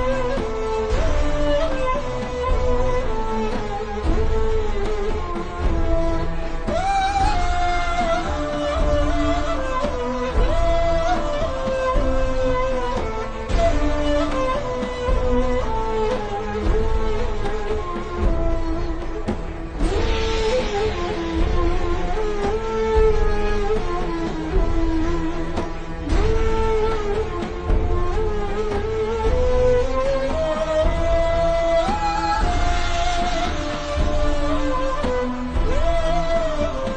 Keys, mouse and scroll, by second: 1.6-2.0 alt+shift+scroll up 2, 2.2 click, 3.1 i, 3.2 click, 3.5 v, 3.6 click, 5.2 i, 5.3 click, 5.7 v, 5.8 click, 7.6 i, 7.7 click, 8.0 v, 8.1 click, 8.8 alt+shift+scroll down 1, 9.3 click, 12.6 click, 13.7 alt+shift+scroll down 2, 15.9-16.7 alt+shift+scroll up 2, 23.9 click, 24.6 BackSpace, 25.7 click, 33.8 typing, 34.8 click, 35.3 v, 35.4 click, 36.5 i, 36.6 click, 36.9 v.